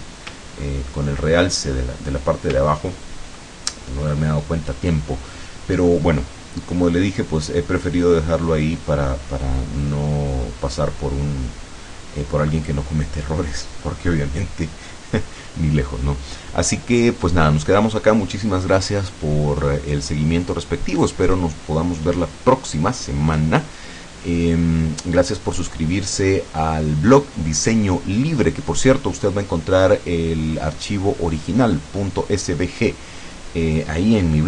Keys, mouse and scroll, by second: 0.6-1.2 ctrl+scroll up 4, 2.6-3.0 ctrl+scroll down 2.